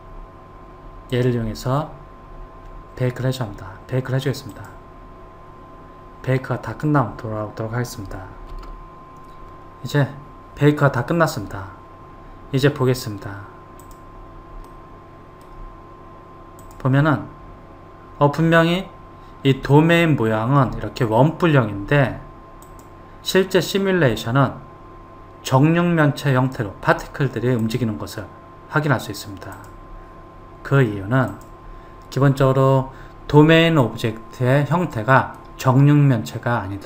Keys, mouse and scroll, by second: 1.3 click, 4.7-10.4 drag, 14.1 click, 15.0-16.9 middle drag, 16.9 click, 20.1-22.9 middle drag, 22.9 click, 27.9 click, 31.6 click, 33.3-34.1 scroll down 1, 34.1-36.8 middle drag.